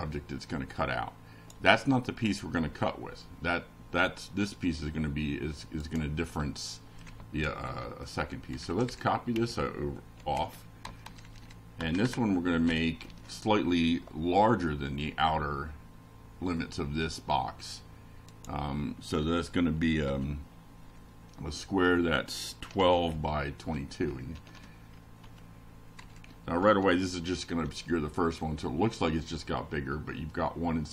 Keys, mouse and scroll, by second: 0.3 ctrl+BackSpace, 0.4 ctrl+v, 5.2 click, 6.9 BackSpace, 9.0-10.8 typing, 10.6 Delete, 11.6 Delete, 12.3 Down, 13.8 F5, 21.5 click, 23.3 Home, 24.0-30.9 typing.